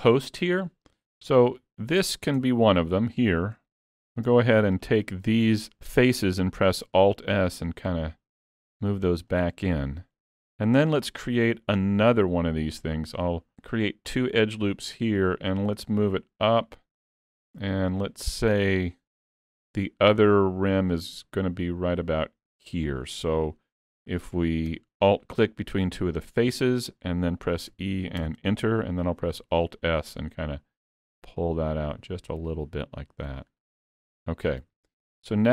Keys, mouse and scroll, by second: 1.3 click, 2.4 Tab, 2.8 scroll up 3, 3.2 shift+middle click, 3.9 3, 4.8 alt+click, 9.8 shift+middle click, 11.6 ctrl+r, 15.9 click, 19.2 alt+click, 20.2 click, 25.6 alt+click, 27.7 e, 29.6 alt+s, 35.0 middle click.